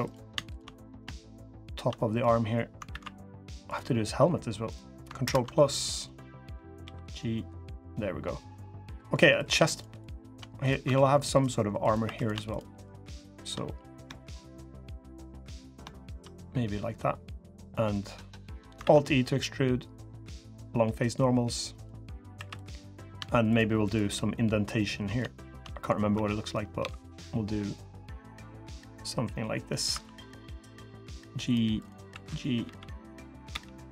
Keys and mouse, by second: 0.5 click, 1.7 click, 2.6 alt+e, 5.0 ctrl+KP_Add, 6.6 g, 8.7 click, 8.9 3, 10.7 ctrl+r, 11.8 3, 13.4 click, 16.1 click, 17.5 click, 18.6 alt+e, 21.8 click, 22.1 3, 22.5 click, 24.5 click, 25.1 shift+click, 28.4-29.5 middle drag, 28.4 |, 29.7 2, 30.5 g.